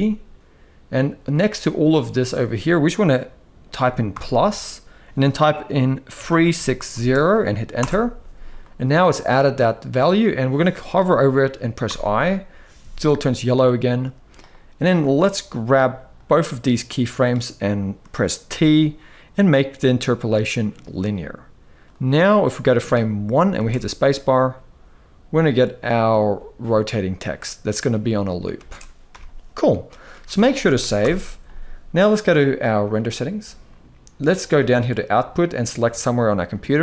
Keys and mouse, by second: 11.6 i, 15.8-17.0 drag, 18.1 t, 21.5-22.5 drag, 23.2 space, 28.2 space, 28.7 n, 29.9 ctrl+s, 30.0 ctrl+s, 30.2 ctrl+s, 30.7 shift+Left.